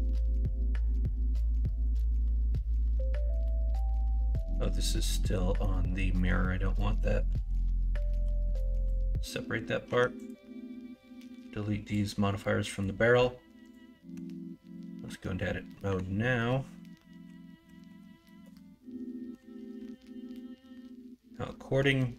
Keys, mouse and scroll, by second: 0.9 middle click, 1.5 middle click, 2.2 middle click, 4.3 middle click, 5.2 middle click, 8.2 p, 9.8 Tab, 14.1 Tab, 15.8 l, 17.2 r, 19.3 KP_1, 19.7 KP_3.